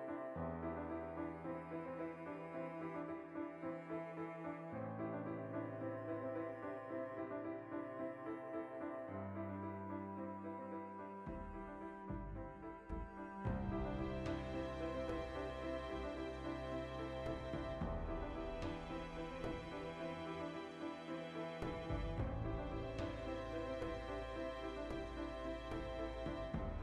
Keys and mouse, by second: 0.1-1.2 shift+middle drag, 0.8 g, 1.5 right click, 2.2 alt+p, 2.8 right click, 3.6 g, 4.2 click, 4.3-6.0 middle drag, 5.6 g, 6.0 click, 6.1-7.3 shift+middle drag, 7.0 s, 7.3 click, 7.6 middle click, 7.6 g, 7.9 click, 8.2 alt+q, 8.4-9.3 shift+middle drag, 9.1 g, 9.3 click, 9.4 g, 9.7 click, 10.0-20.2 shift+middle drag, 10.5 ctrl+2, 12.4 \, 22.0 alt+q, 22.3 ctrl+middle click.